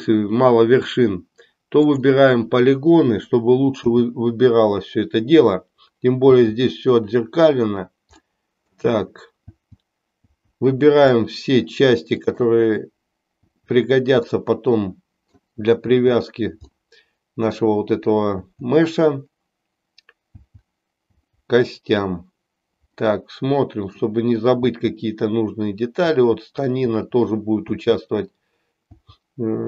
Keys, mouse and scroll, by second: 1.7 click, 3.8 l, 8.3 middle click, 9.7 l, 11.3-12.5 middle drag, 13.5 l, 14.5-15.6 middle drag, 16.8 middle click, 22.9-24.1 middle drag, 24.8 l.